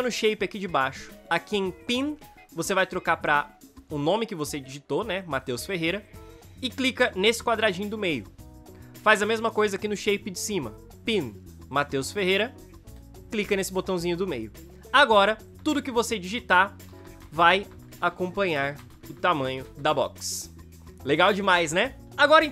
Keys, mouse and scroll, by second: 15.8 ctrl+a, 16.9-19.9 typing, 22.1 s.